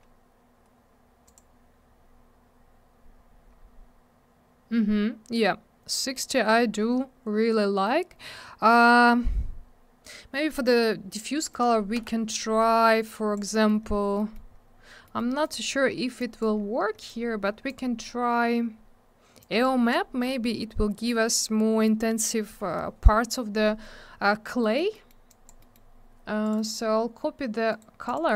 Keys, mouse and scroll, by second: 1.2 click, 1.4 click, 1.7 scroll up 1, 3.6-5.7 scroll down 1, 8.0-8.5 scroll up 1, 8.7 scroll down 1, 11.5 click, 11.6 click, 12.0 m, 13.1 click, 13.5 middle click, 13.7 middle click, 13.8-14.2 scroll down 1, 14.2 middle click, 14.3 middle click, 14.5 scroll up 1, 15.1 middle click, 15.2 middle click, 15.4 click, 16.2 click, 16.5 scroll up 1, 17.0 middle click, 17.1 middle click, 17.7 click, 17.7 click, 19.4 click, 24.6 middle click, 24.8 middle click, 24.9 middle click, 25.1 double middle click, 25.3 click, 25.5 click, 25.6 middle click, 25.7 double middle click, 26.4 click, 26.5 click, 26.6 click, 26.6 double click, 27.7 right click, 27.8 right click, 28.1 click, 28.1 double click, 28.3 middle click.